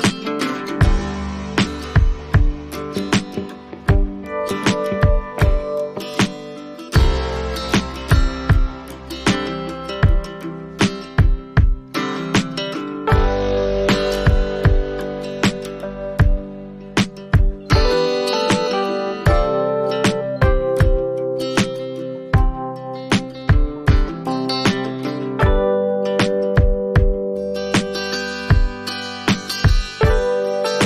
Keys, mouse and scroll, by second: 2.9 click, 3.7 click, 7.4 click, 7.7-8.9 scroll, 8.9 click, 9.7 click, 11.7 click, 13.0 click, 13.9 click, 15.7 click, 19.6 click, 20.5 click, 21.3 click, 22.8 click, 25.2 click, 26.0 click, 27.1 click, 30.2 click.